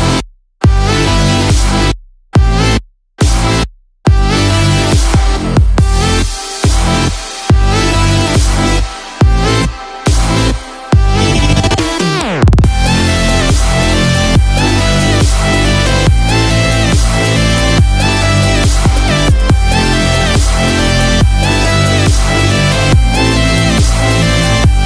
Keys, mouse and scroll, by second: 0.5-0.9 scroll up 1, 2.6 scroll up 1, 2.6 middle click, 5.8 shift+middle click, 6.8 middle click, 8.8 shift+middle click, 20.7 middle click, 22.6 ctrl+z, 23.8 middle click.